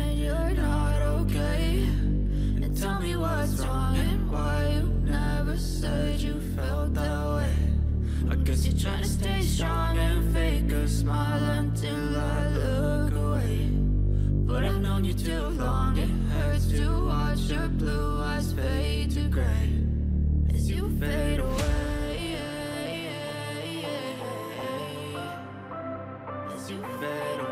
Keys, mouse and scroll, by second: 1.1 scroll down 3, 1.7-2.4 scroll up 7, 3.9-5.0 scroll up 2, 7.5-11.4 typing, 13.6 click, 13.6 y, 16.4-19.3 ctrl+drag, 22.6 double click, 27.4-27.5 typing.